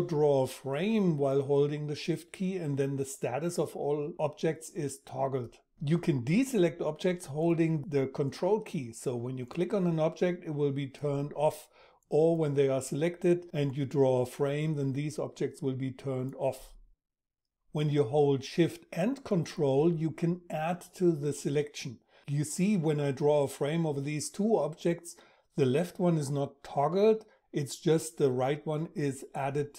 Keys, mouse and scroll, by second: 5.9-16.5 ctrl+drag, 18.2-28.8 ctrl+shift+drag.